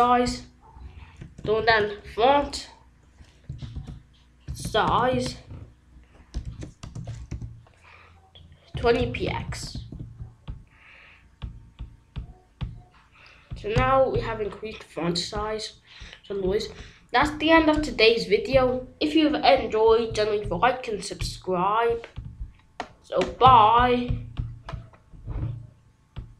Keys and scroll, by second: 4.6 i, 5.2 e, 7.8 Left.